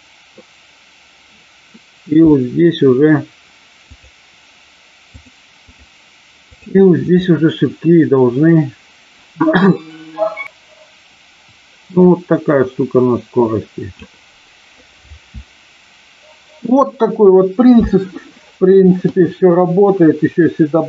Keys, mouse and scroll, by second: 3.9 click, 5.1 click, 6.4 click, 10.4-13.9 drag.